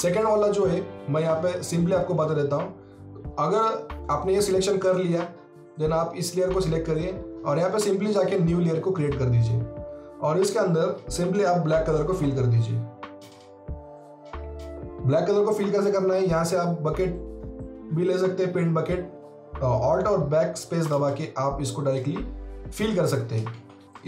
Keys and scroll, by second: 12.1 shift+BackSpace, 19.1 alt+BackSpace, 23.5 ctrl+z.